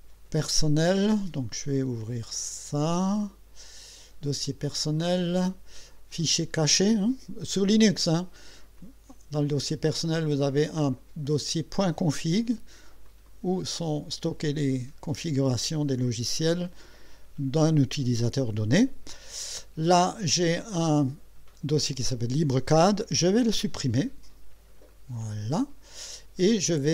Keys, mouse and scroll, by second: 2.0 click, 4.4 click, 6.1 click, 8.8 click, 13.0 click, 15.4 scroll down 2, 16.4 scroll down 2, 19.8 scroll down 2, 22.0 click, 23.3 Delete, 24.9 click.